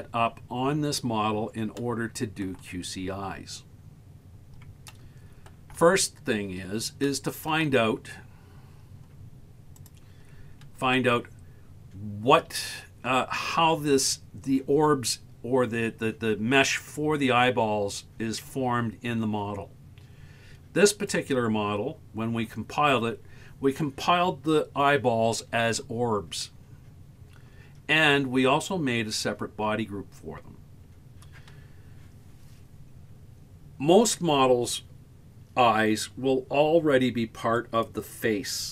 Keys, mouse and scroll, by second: 0.0-0.8 scroll up 2, 0.8 scroll down 2, 1.8-2.5 shift+middle drag, 3.0-3.6 scroll down 1, 4.2 scroll up 3, 4.9-5.5 shift+middle drag, 6.3-6.7 scroll up 2, 7.1-7.5 shift+middle drag, 20.9 right click, 37.6 right click.